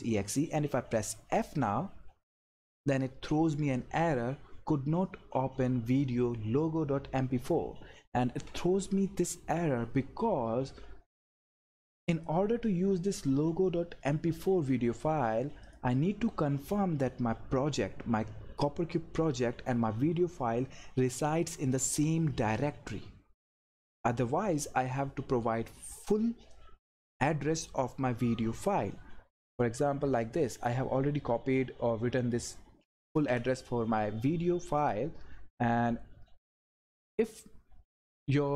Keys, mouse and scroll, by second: 2.1 f, 12.1 click, 15.6 click, 30.5 click, 32.9 ctrl+c, 34.8 click, 34.9 click.